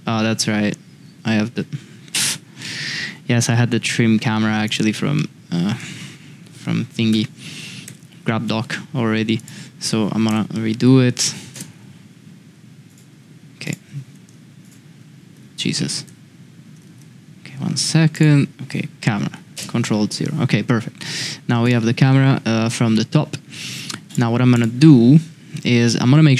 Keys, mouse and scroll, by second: 0.0 x, 1.0 x, 2.6-3.0 middle drag, 3.5 middle click, 5.1-5.5 middle drag, 7.1 KP_7, 7.8 KP_Decimal, 10.3 KP_Decimal, 13.1 x, 16.0 x, 16.8 shift+a, 19.5 ctrl+alt+KP_0, 24.5 click.